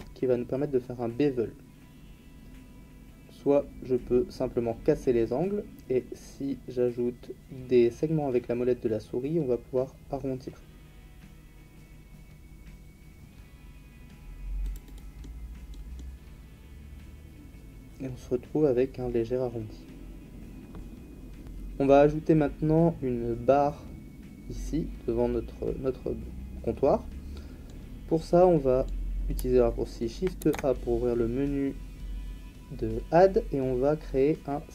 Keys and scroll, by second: 30.4 shift+a.